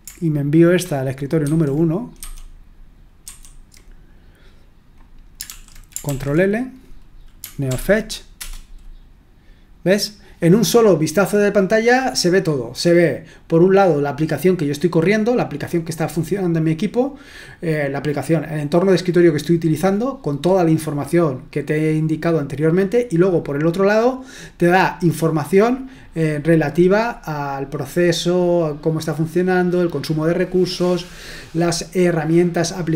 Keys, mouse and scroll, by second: 1.5 super+!, 2.2 super+2, 3.3 super+1, 5.4 super+l, 6.0 ctrl+l, 7.6 ctrl+p, 8.3 Return.